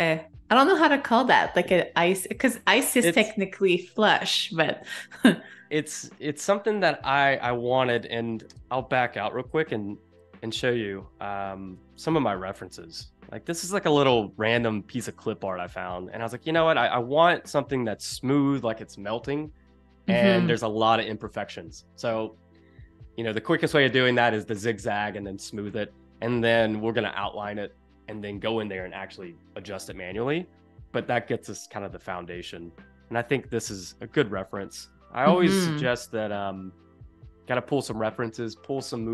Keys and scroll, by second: 8.6 Escape, 9.5 super+-, 10.0 space, 11.2 super+-, 11.6 space, 34.8 space.